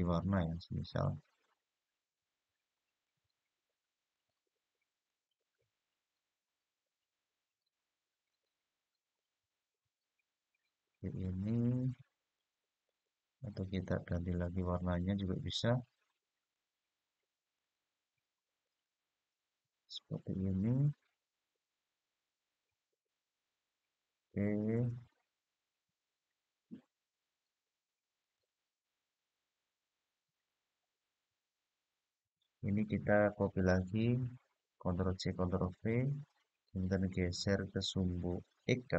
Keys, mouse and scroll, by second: 0.0-2.9 drag, 3.9 click, 4.8 click, 8.0 click, 8.9-12.1 middle drag, 12.6 click, 14.3 click, 15.5-16.3 drag, 17.3 click, 18.3 click, 23.2-24.0 scroll down 2, 27.9 click, 33.7 ctrl+c, 35.3 ctrl+v, 37.1-38.8 g.